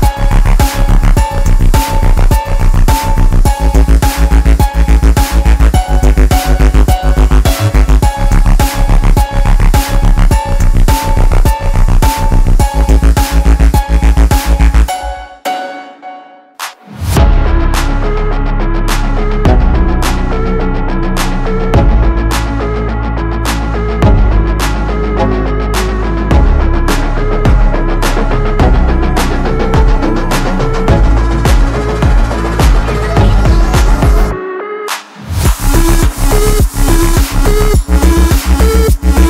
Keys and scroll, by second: 21.8 1, 22.3 5, 23.2 -, 24.1 5, 38.4 ctrl+t.